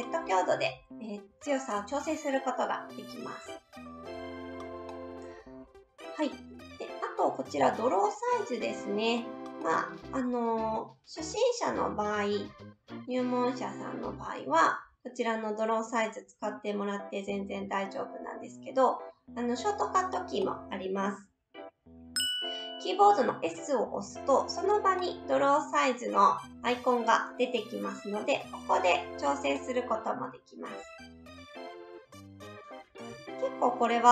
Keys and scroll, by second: 23.5 s, 33.1 s.